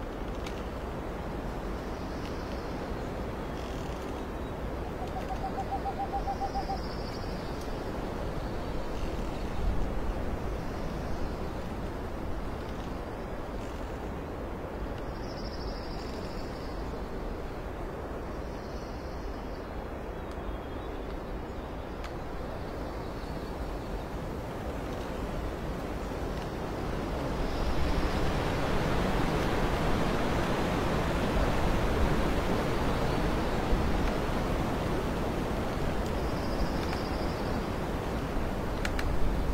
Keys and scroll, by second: 0.3 alt+space, 1.3 x, 1.8 space, 2.8 space, 5.0 space, 5.7 space, 9.1 alt+space, 13.3 ctrl+t, 17.7 alt+space, 28.6 alt+space, 30.4 ctrl+z, 33.2 Up, 33.3 Up, 33.3 Left, 33.4 Down, 33.5 Up, 33.5 Left, 33.9 space, 38.3 alt+x.